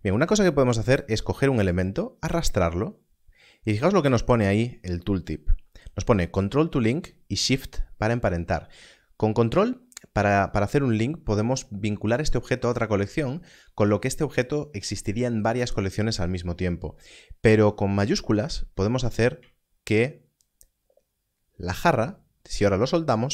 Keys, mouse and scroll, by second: 1.7 click.